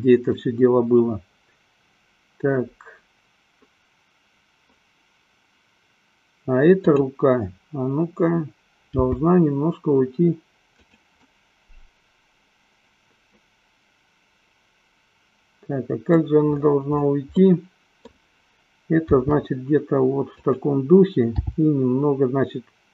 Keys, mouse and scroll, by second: 0.8-4.8 middle drag, 6.8 click, 8.9 g, 11.3 click, 11.6-16.6 middle drag, 17.7 middle click, 19.4 r, 20.8 click, 21.8 g.